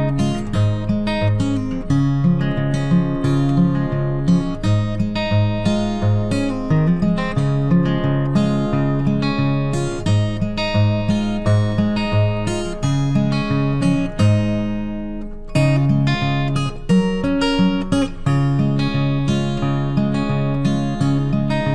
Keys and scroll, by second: 2.5 ctrl+t, 17.0 ctrl+t.